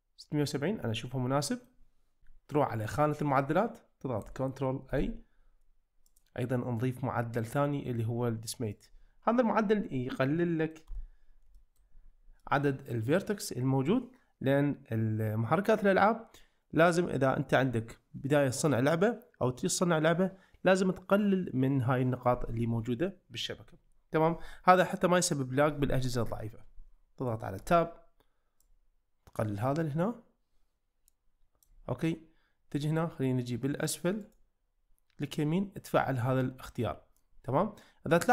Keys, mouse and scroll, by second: 4.9 ctrl+a, 6.1-8.8 drag, 10.4 middle drag, 10.9 Tab, 11.5 shift+middle click, 12.4-13.6 middle drag, 27.6 Tab, 28.6-31.7 drag, 34.4-37.4 right drag.